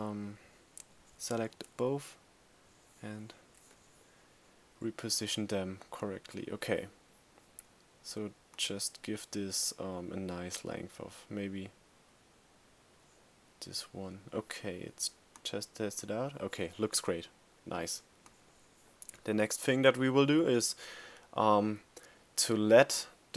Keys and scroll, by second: 1.0 Down, 3.2 Up.